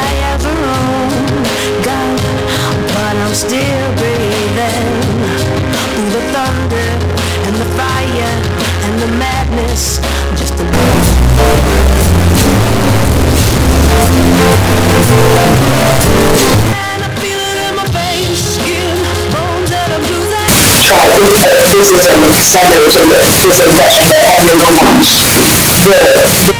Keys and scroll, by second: 16.8 Page_Down, 26.5 space.